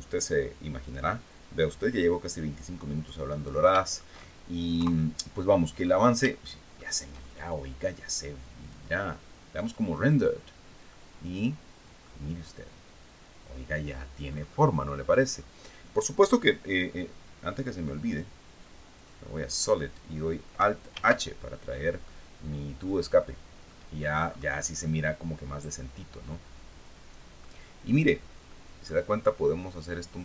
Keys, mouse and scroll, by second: 0.3 click, 1.3 click, 2.2-2.5 scroll down 2, 2.8-3.1 scroll down 2, 3.2 shift+middle click, 4.2 KP_3, 5.2 scroll up 1, 5.9 shift+middle click, 6.8-7.1 shift+scroll down 1, 8.1 click, 9.5 click, 10.4-11.7 middle drag, 12.8 scroll down 1, 13.7-14.2 scroll up 1, 14.8 scroll down 2, 17.6 click, 18.4 click, 20.4 alt+h, 21.5-22.7 drag, 22.7-23.0 scroll down 2, 23.1 click, 23.7 scroll up 2, 24.3-27.0 middle drag, 27.9 middle click.